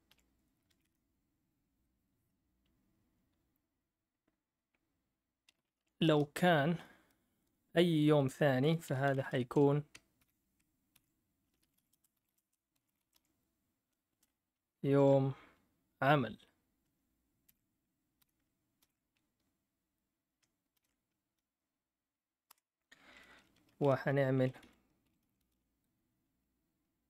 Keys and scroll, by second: 0.0-1.3 typing, 3.1-3.8 typing, 5.2-6.2 typing, 8.6-14.1 typing, 17.2-18.8 typing, 20.7 shift+', 22.4 Return, 24.1-27.0 typing.